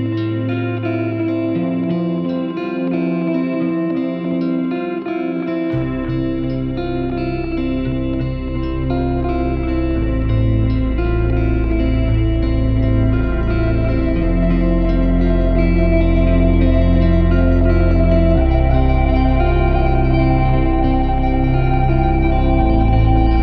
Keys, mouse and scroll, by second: 0.9 scroll up 2, 1.2-1.8 scroll down 1, 1.8 scroll down 1, 2.0-4.0 middle drag, 4.0 click, 5.5-8.5 drag, 9.2-12.6 drag, 12.6 s, 12.9 s, 13.6-15.0 drag, 13.6-17.1 middle drag, 17.1-22.8 drag, 22.8 shift+a.